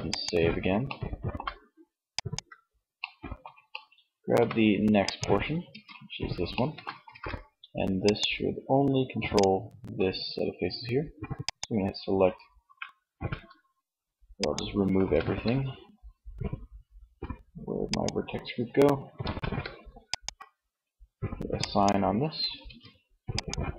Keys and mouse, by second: 4.8 Tab, 6.2 ctrl+Tab, 10.6-11.8 drag, 11.8 a, 12.2 a, 13.3-15.5 drag, 13.9 a, 17.1-18.7 drag, 18.4 a, 21.7 Tab, 23.5 Tab.